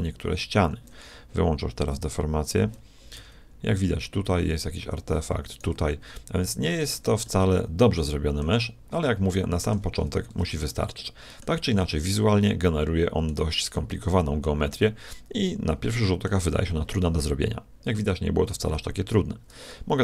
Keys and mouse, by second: 1.9-3.8 drag, 3.2 g, 5.5-7.3 right drag, 5.7 g, 7.3-8.9 middle drag, 9.3 middle click, 10.3 Tab, 11.9-16.5 middle drag.